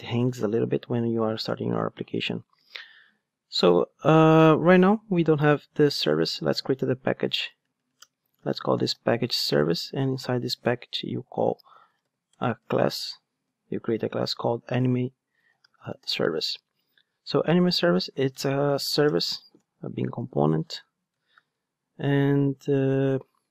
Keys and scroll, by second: 6.8 super+n, 10.5 super+n, 19.6 Return.